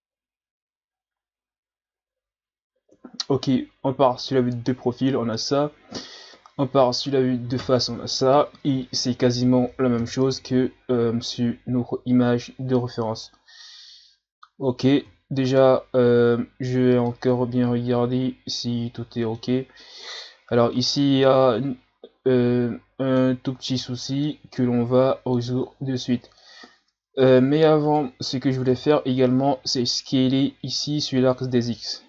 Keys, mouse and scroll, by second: 0.9-1.4 scroll down 5, 2.9 KP_3, 4.5 ctrl+scroll up 3, 6.4 KP_1, 9.9 KP_3, 11.7 scroll down 1, 13.2-15.0 middle drag, 15.0 KP_1, 16.4-17.1 shift+scroll up 3, 17.1-19.9 middle drag, 19.9-21.2 scroll up 9, 21.2-23.8 middle drag, 23.8 scroll down 4, 24.2-25.6 middle drag, 25.6-26.5 scroll down 6, 26.5-27.9 middle drag, 27.9 right click, 28.7 KP_1, 29.7-32.0 shift+scroll up 1.